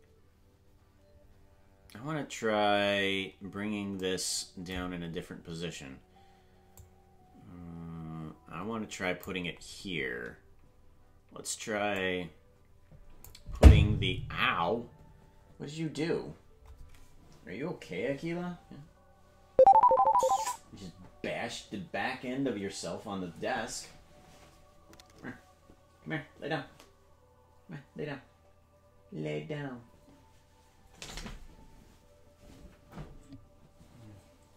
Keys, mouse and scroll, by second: 5.0-6.8 scroll down 3, 6.8-9.3 drag, 11.9-13.3 drag, 14.0-15.0 scroll down 4.